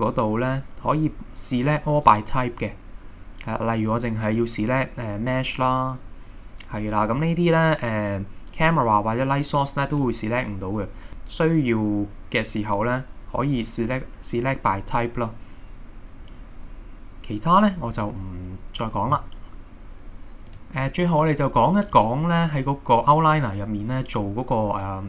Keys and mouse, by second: 10.0-17.7 drag, 20.6 click.